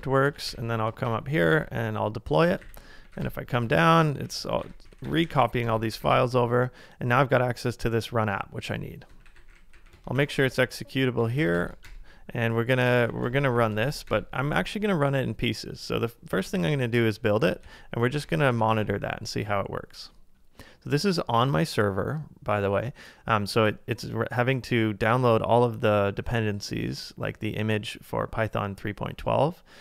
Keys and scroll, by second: 0.4 ctrl+a, 0.5 k, 1.1 Up, 1.5 Return, 2.5 ctrl+a, 2.6-4.9 typing, 8.8-14.4 typing, 15.9 typing, 17.6 super+v, 18.2 Return, 18.6 ctrl+a.